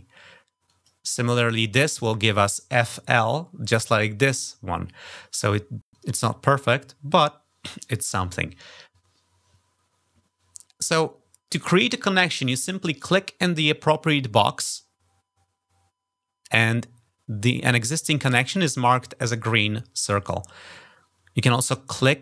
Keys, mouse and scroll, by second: 0.4 click, 5.7 click, 12.8 click, 21.3-22.2 drag.